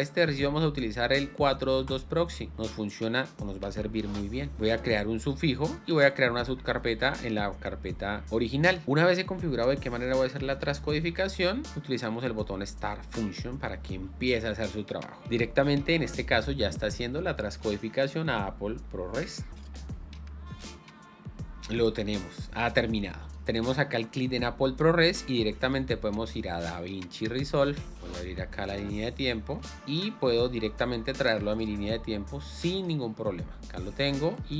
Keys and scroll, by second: 27.9 Return, 29.7 alt+Tab, 33.2 alt+Tab.